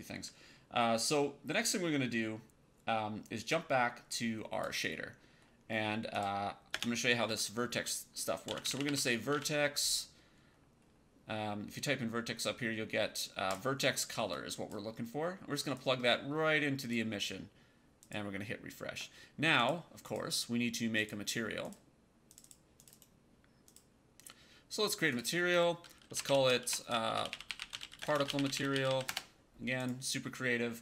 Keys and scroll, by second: 6.6 space, 8.1-9.7 typing, 26.1-29.3 typing.